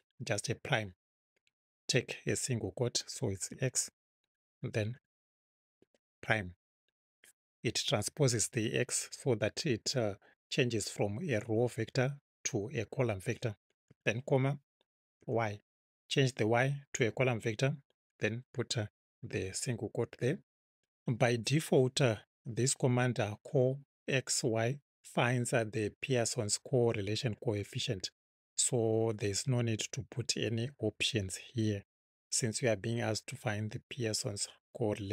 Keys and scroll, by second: 3.5 x, 4.9 ', 13.9 ,, 15.2 y, 19.2 '.